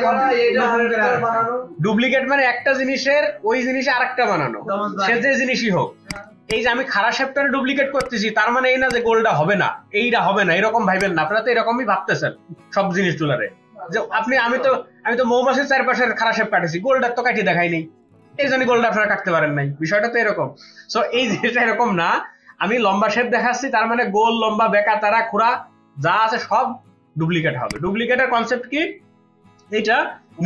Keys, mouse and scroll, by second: 6.5 double click.